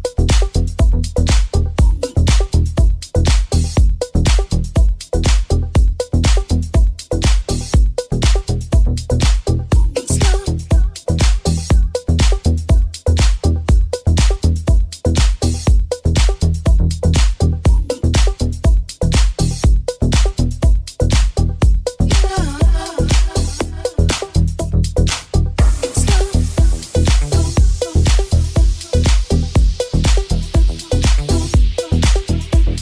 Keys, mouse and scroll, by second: 3.1 alt+z, 3.5 alt+z, 4.6 Tab, 8.3 shift+s, 15.2 x, 15.5 Tab, 15.9 shift+a, 16.7 s, 18.1 g, 19.1 g, 21.0 Tab, 21.6 ctrl+r, 23.5 right click, 23.6 shift+middle click, 23.8 shift+right click, 23.9 shift+middle click, 24.2 shift+click, 24.2-28.1 shift+middle drag, 26.4 g, 28.1-30.8 shift+drag, 30.8-32.8 middle drag, 31.9 right click, 32.5 shift+right click.